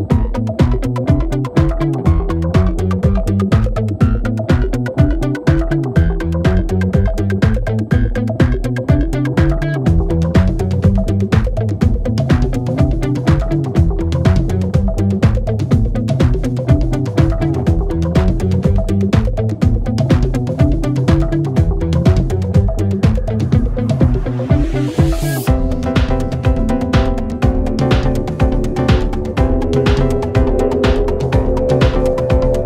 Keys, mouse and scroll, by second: 1.2 click, 1.4 click, 2.4 g, 3.6 middle click, 4.1 KP_7, 4.4 click, 4.9 scroll down 1, 5.1 g, 6.5 scroll down 2, 6.7 middle click, 6.9 a, 7.4-8.2 drag, 8.4 scroll down 1, 8.6-9.1 middle drag, 9.1 click, 10.0-10.5 middle drag, 10.5-11.1 scroll up 1, 11.1 click, 11.5 space, 14.7 click, 15.1 click, 18.3 click, 18.6 space, 18.8 click, 19.2 s, 21.2 space, 23.6-25.1 scroll down 1, 26.1 space, 26.4-27.6 middle drag, 27.6 n, 28.3 click, 28.8 click, 29.2-30.3 drag, 30.3 g, 31.5-32.6 scroll up 3.